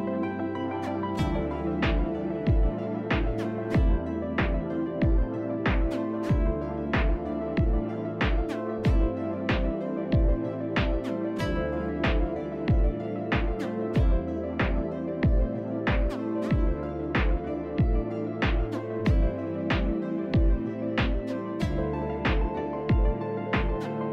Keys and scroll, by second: 3.0 ctrl+c, 3.4 ctrl+v, 4.4 F3, 5.3 F3, 19.0-20.3 typing, 21.6 F3, 21.7 F3, 22.2 shift+s, 22.6 shift+s.